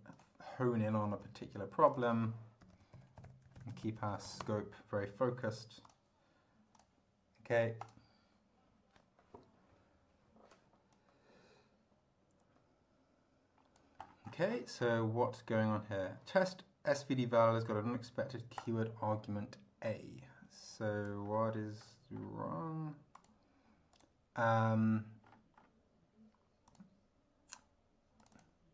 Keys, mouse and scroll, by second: 0.1 click, 1.2 Delete, 1.9 click, 2.4-4.8 typing, 5.8 click, 6.8 click, 7.8 click, 10.9-14.0 drag, 14.5 scroll down 2, 18.6 click, 19.8-21.2 drag, 21.2-21.7 scroll up 1, 21.8-22.4 scroll up 3, 23.2 click, 24.0 click, 25.2-25.8 scroll up 3, 26.7 click, 28.2 click.